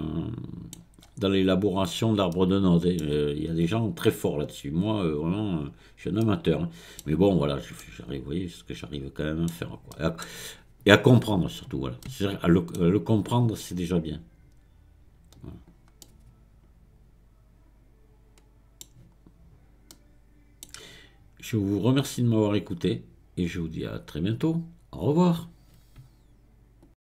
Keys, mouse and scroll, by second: 1.1-2.4 scroll up 4, 2.4-4.9 middle drag, 4.9 click, 5.8-6.3 scroll down 3, 6.3-13.7 middle drag, 13.7-16.1 scroll up 1, 16.1-19.1 middle drag, 19.4-19.9 scroll down 1, 19.9-23.0 middle drag.